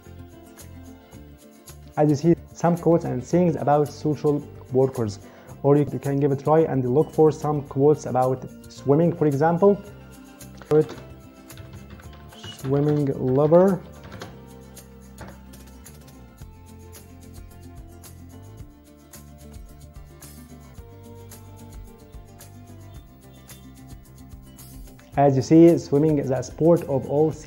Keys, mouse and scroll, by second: 10.8-14.4 typing, 15.0 Return.